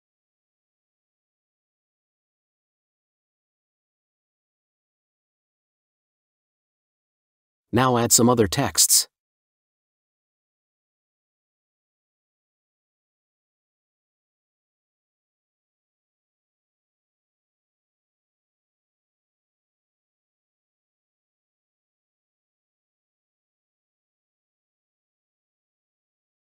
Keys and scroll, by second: 15.0-19.0 typing, 16.3 Return, 20.3 space, 21.1 BackSpace, 22.5 ctrl+t, 24.4 Return, 25.0 ctrl+t.